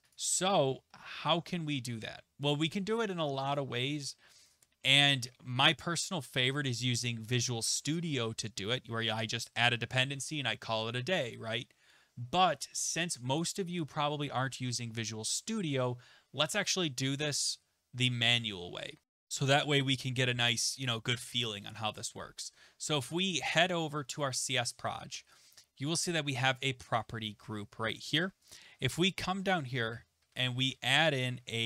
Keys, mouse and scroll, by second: 0.1 click, 2.3-4.0 scroll, 4.0-4.7 scroll, 4.7-5.1 scroll, 11.3 click, 12.9 click, 24.5 click, 27.9 click, 28.5 click, 29.3 Return, 30.7-31.6 typing.